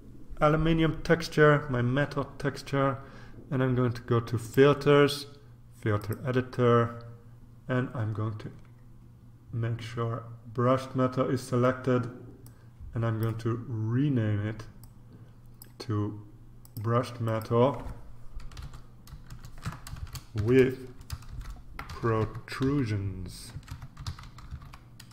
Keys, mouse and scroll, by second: 4.4 click, 5.9 click, 7.9-9.3 scroll down 2, 12.4 click, 14.8 click, 16.6 click, 18.6 -, 19.6-25.1 typing.